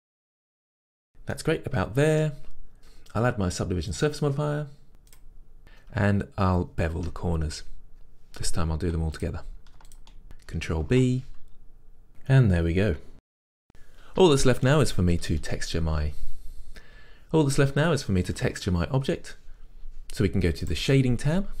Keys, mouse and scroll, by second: 0.9 click, 1.0 Tab, 1.2-2.6 middle drag, 1.2 scroll down 2, 2.5 scroll up 2, 5.2-9.3 drag, 5.6 scroll up 1, 7.0 Tab, 8.4 2, 10.0 alt+shift+click, 11.0 ctrl+b, 12.8-21.6 middle drag.